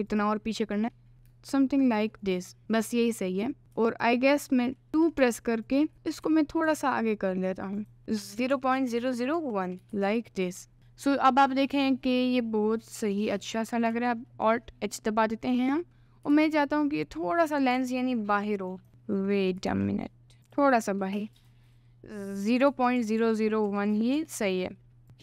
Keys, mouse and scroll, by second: 0.1 click, 0.9 g, 2.6 middle click, 2.8 scroll up 1, 3.7 x, 4.9 ctrl+z, 4.9 2, 5.7 alt+click, 5.9 middle click, 6.1 scroll up 1, 6.2 g, 7.8 click, 8.2-9.8 drag, 9.0 0, 9.9 ctrl+s, 11.1 middle click, 14.0 alt+h, 14.4 middle click, 14.8 scroll up 1, 15.2 middle click, 15.6-16.4 scroll up 1, 16.4 g, 17.7 g, 18.9 g, 19.0 middle click, 19.6 g, 20.4 g, 21.4 click, 22.3-24.2 drag, 23.2 0, 25.0 s.